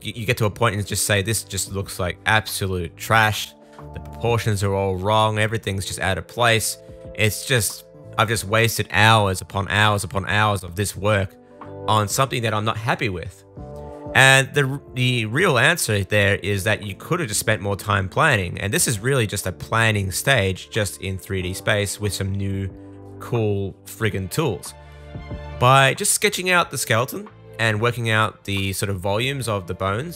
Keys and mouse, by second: 0.2 super+z, 0.5 middle click, 0.6-2.7 shift+super+drag, 5.4 super+z, 6.3 super+z, 6.5 super+z, 8.5 super+z, 9.8 super+z, 13.4 super+z, 18.6-22.3 drag, 22.3 middle click, 22.9 super+z, 23.9 shift+middle click, 24.3 super+z, 24.5 super+z, 24.9 super+middle click, 25.1 shift+middle click, 25.4 super+z, 25.6 super+z, 27.1 super+z, 27.3 super+z, 27.4 super+z, 28.2 super+z, 29.1 super+z, 29.9 super+z.